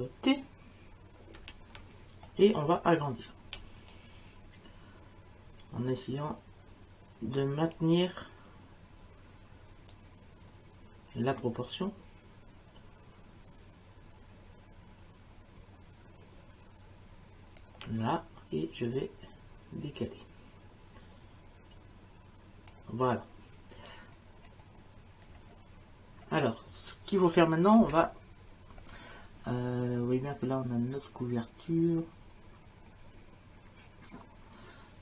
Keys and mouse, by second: 1.4 ctrl+t, 3.9 shift+click, 9.9 shift+click, 19.0 click, 27.8 Return, 27.8 KP_Enter.